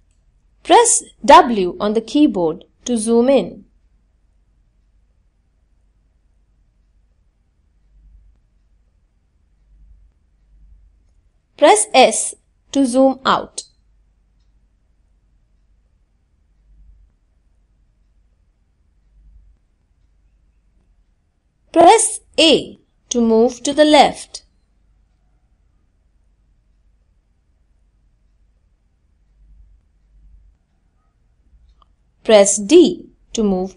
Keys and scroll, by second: 10.2 s, 10.8 s, 20.3 a, 20.9 a, 30.7 d.